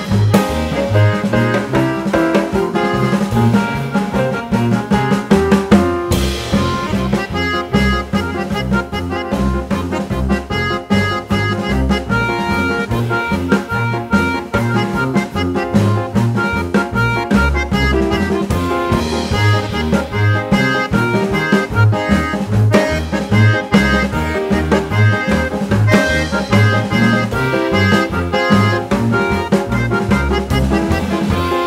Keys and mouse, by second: 0.4 ctrl+v, 0.7 g, 2.0-3.4 drag, 4.8 ctrl+v, 5.0 g, 6.7-9.0 drag, 9.4-10.7 drag, 12.0 ctrl+v, 12.2 g, 13.8-15.4 drag, 16.8 ctrl+v, 17.1 g, 18.9-21.0 drag, 21.7-22.8 drag, 24.1 ctrl+v, 24.1-27.4 typing, 24.4 click, 24.8 ctrl+v, 25.1 click, 25.4 click, 25.8 ctrl+v, 26.0 click, 26.3 click, 26.6 ctrl+v, 26.9 click, 27.3 ctrl+v, 27.7 click, 28.1 click, 28.5 ctrl+v, 28.5 g, 28.8 click, 29.1 ctrl+v, 29.1 g, 29.4 click, 29.7 click, 30.1 ctrl+v, 30.2 g, 30.4 click.